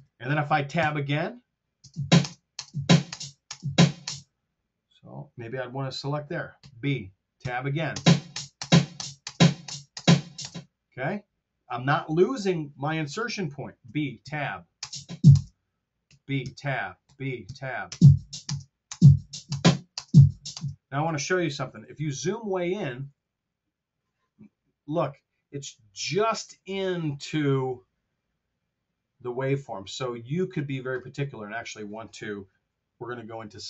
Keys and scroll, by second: 0.7 Tab, 1.6 space, 6.6 b, 7.4 Tab, 7.8 space, 13.8 b, 14.1 Tab, 14.6 space, 15.9 b, 16.3 Tab, 16.9 b, 17.3 Tab, 17.8 space, 21.8 t.